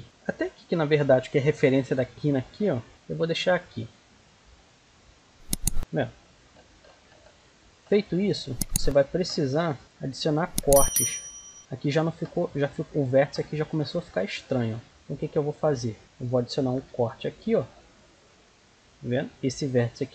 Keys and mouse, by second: 3.1-5.1 drag, 5.1-8.0 middle drag, 8.0-9.1 right drag, 8.6 g, 9.6-11.0 right drag, 9.8 g, 11.0 click, 11.3-12.4 right drag, 13.2-14.2 right drag, 14.0 click, 14.2 middle click, 16.7 k, 19.0-20.1 right drag.